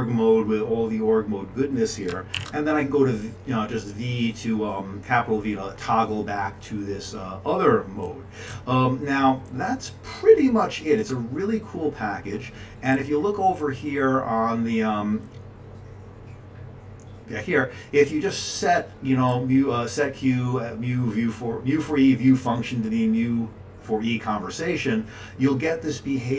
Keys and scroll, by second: 2.3 v, 8.5 q.